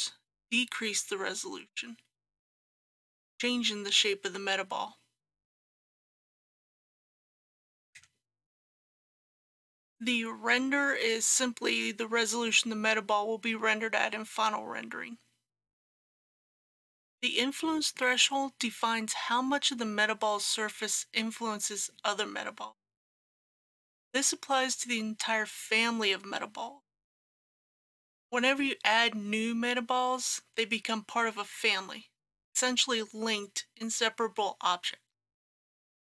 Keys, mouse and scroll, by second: 7.2 KP_Decimal, 7.6 KP_2, 16.4 click.